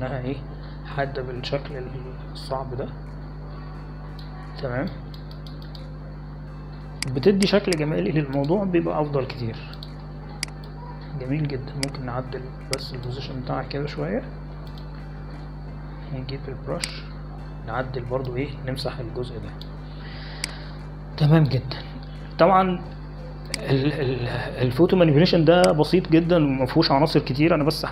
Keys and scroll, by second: 18.9 b.